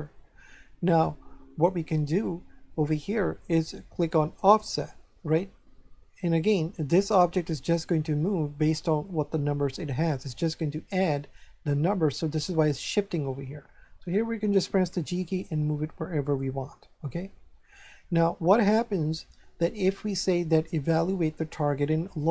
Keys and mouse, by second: 4.3 click, 14.3 g, 16.2 click, 20.8 click.